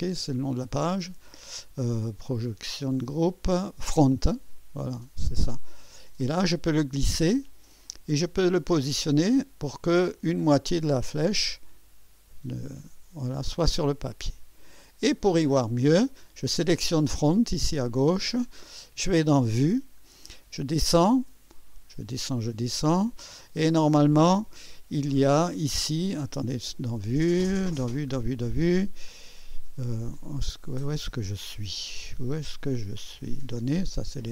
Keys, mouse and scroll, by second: 1.1 click, 3.1 click, 5.5-14.9 drag, 16.4 click, 19.5 click, 20.2 scroll down 1, 20.9 scroll down 1, 21.5-21.8 scroll down 2, 25.5 scroll up 1, 26.7 click, 27.8 scroll up 1, 29.1-29.5 scroll up 1, 30.0 scroll down 1, 33.8 click.